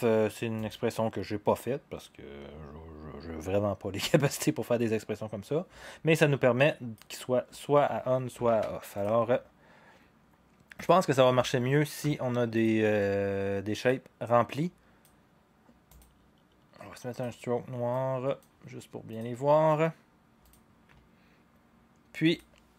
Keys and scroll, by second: 8.5 ctrl+c.